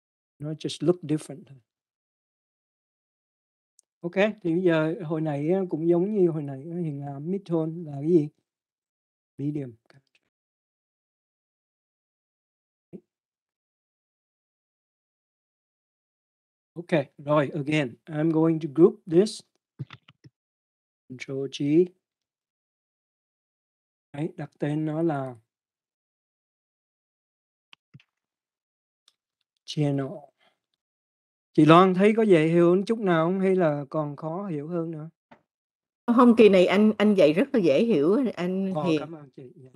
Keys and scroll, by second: 0.3-3.1 typing, 3.7 Return, 22.3 ctrl+g, 29.6-32.2 typing, 35.9 space, 36.4 l, 36.8 m.